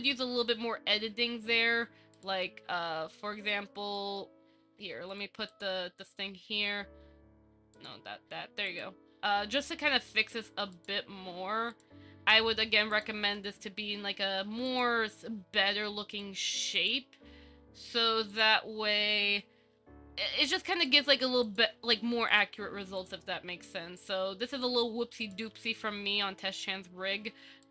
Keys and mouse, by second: 3.8 Tab, 4.1 shift+middle click, 5.3 click, 5.7 click, 7.9 click, 13.1 click, 16.9 click, 24.1 click, 25.6 g.